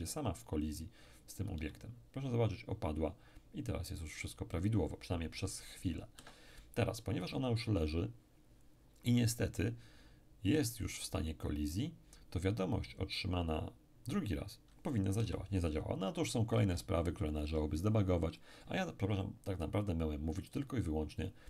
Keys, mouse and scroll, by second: 1.6 p, 6.1 Escape, 15.2 p, 16.5 Escape, 21.2 click.